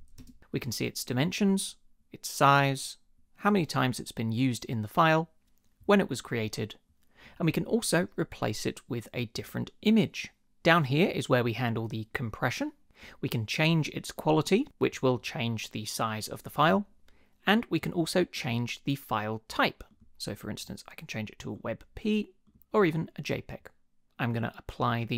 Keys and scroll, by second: 0.0-0.3 typing.